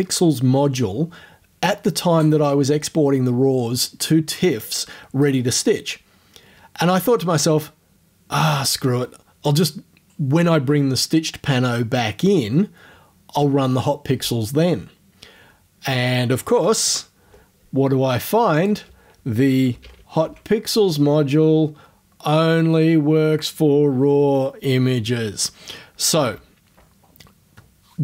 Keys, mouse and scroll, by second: 16.9 Tab, 18.6 click, 19.5-20.7 typing.